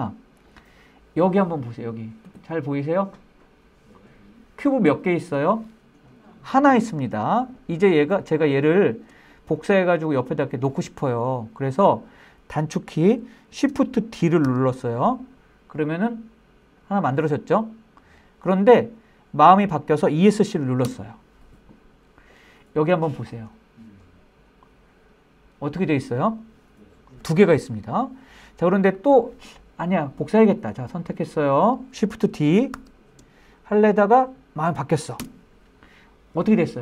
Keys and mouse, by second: 7.5 click, 8.0 shift+middle drag, 11.0 middle click, 13.7 shift+d, 20.1 Escape, 32.0 shift+d, 34.4 Escape.